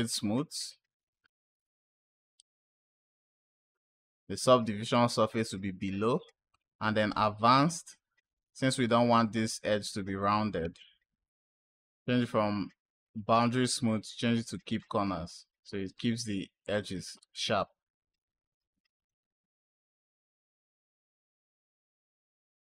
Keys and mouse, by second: 6.4 click, 11.2-14.7 drag, 21.8 click.